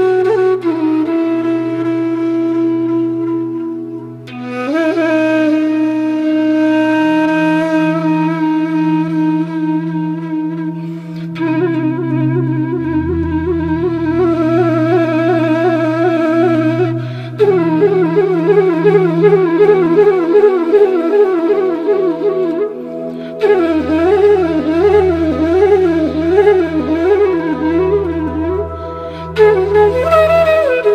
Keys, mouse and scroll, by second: 3.8 click, 7.9 ctrl+alt+z, 9.1 ctrl+click, 21.7-23.5 drag, 23.5 click, 23.9 alt+scroll down 1, 26.1-27.0 alt+scroll up 1, 27.0 click, 29.8 click.